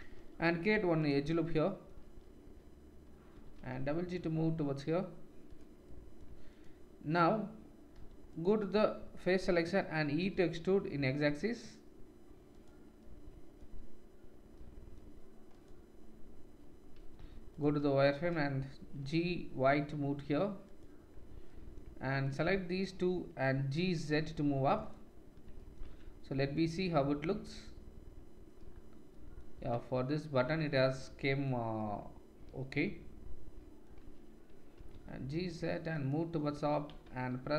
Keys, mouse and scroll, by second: 0.1 ctrl+r, 2.0-7.7 drag, 3.3 g, 6.5-7.7 middle drag, 6.5-7.7 right drag, 7.9 3, 8.2 click, 10.1 e, 15.5 click, 17.1 1, 17.7-22.7 shift+drag, 18.0 shift+middle click, 18.0 shift+right click, 18.9 g, 22.7 shift+middle click, 22.8-26.6 shift+drag, 23.8 g, 25.8 Tab, 26.7 click, 26.9 click, 27.5-37.5 drag, 29.5 Tab, 34.7 g, 37.3 ctrl+r.